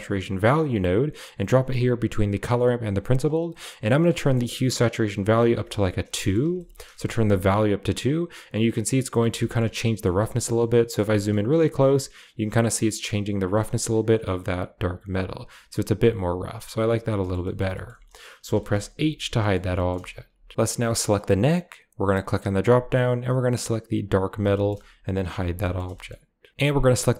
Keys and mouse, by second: 3.0 click, 4.0 middle click, 5.1 click, 6.0 shift+middle drag, 6.5 ctrl+middle drag, 6.9 middle click, 7.7-8.7 shift+middle drag, 9.1 middle click, 9.4 shift+middle click, 9.9-10.3 shift+middle drag, 10.6 shift+middle click, 11.1 middle click, 12.1-13.2 shift+drag, 14.3 click, 17.1 shift+middle click, 17.3 middle drag, 17.7 shift+middle click, 18.5 shift+middle click, 18.9 h, 19.4 middle drag, 19.7 shift+middle click, 22.1-23.9 drag, 24.5 shift+middle drag, 25.1 h, 25.5 shift+middle click, 25.9 middle drag.